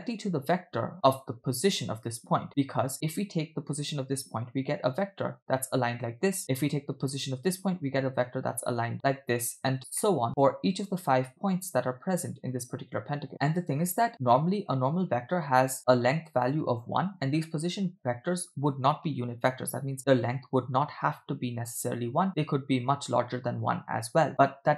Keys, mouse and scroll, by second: 1.2 click, 4.3 click, 5.2 click, 7.0 click, 7.9 click, 8.9 click, 10.0 shift+middle click, 12.1 click, 13.2 click, 15.8 click, 16.6 click.